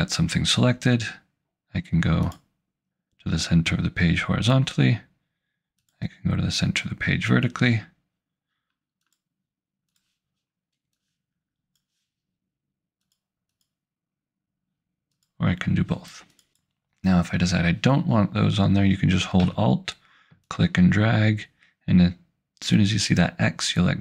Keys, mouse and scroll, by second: 2.3 click, 5.9 click, 9.1 click, 13.6 click, 20.5 alt+click.